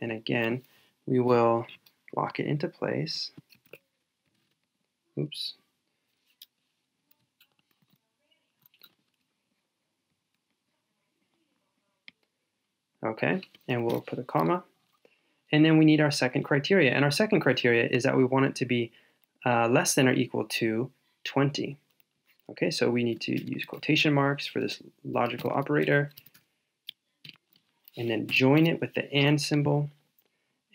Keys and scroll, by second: 7.8 super+z.